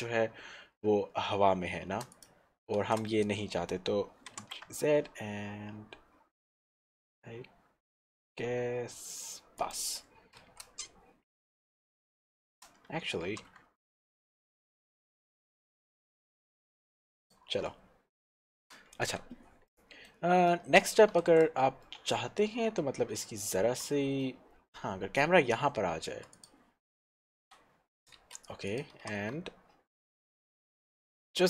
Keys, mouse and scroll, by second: 2.4 click, 2.4 shift+z, 3.0 shift+z, 4.6 z, 9.6 shift+click, 10.4 shift+z, 18.8 shift+z, 19.0 scroll down 1, 19.3 Tab, 19.6 scroll down 1, 19.8 middle click, 21.4 shift+z, 22.6 scroll up 1, 24.5 middle click, 26.8 click, 27.8 Tab, 28.7 click, 29.2 z.